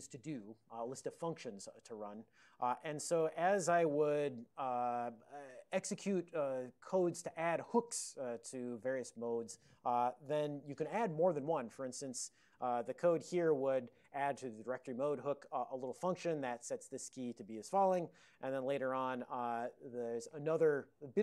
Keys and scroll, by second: 4.3 ctrl+a, 4.7 ctrl+n, 5.0 ctrl+n, 5.1-6.5 ctrl+n, 8.9 ctrl+l.